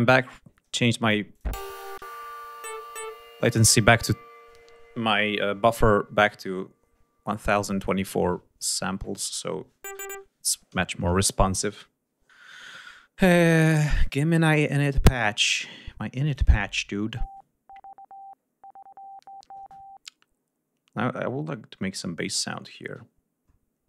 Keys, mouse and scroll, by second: 0.0 F1, 1.1 click, 1.3 space, 13.7 click, 14.3-15.1 scroll down 1, 15.3-15.9 scroll down 1, 16.1 click.